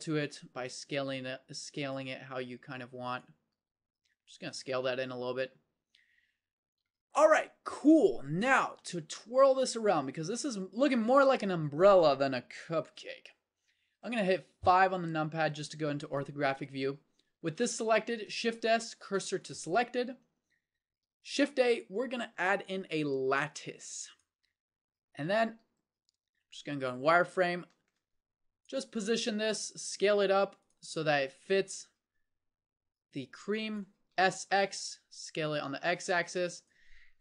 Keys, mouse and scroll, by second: 3.5 s, 4.7 Tab, 5.5-8.2 drag, 12.9 KP_1, 14.6 KP_5, 18.5 shift+s, 21.4 shift+a, 26.0 z, 27.0-28.7 drag, 29.1 s, 31.6 click, 32.5 click, 34.1 s.